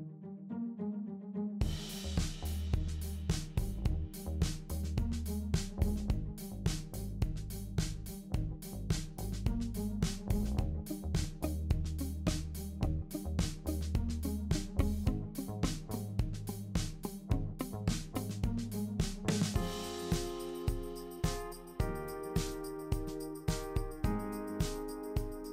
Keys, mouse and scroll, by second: 13.7 click, 14.2 shift+click.